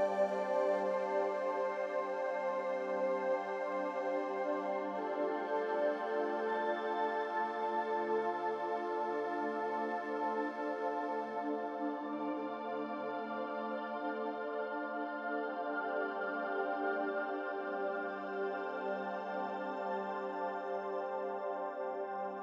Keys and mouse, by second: 1.7 shift+click, 3.6-5.1 middle drag, 5.9 drag, 6.8 g, 9.0 ctrl+z, 10.3 click, 11.2 click, 11.6 g, 15.3-16.2 middle drag, 16.9 click, 17.4 g.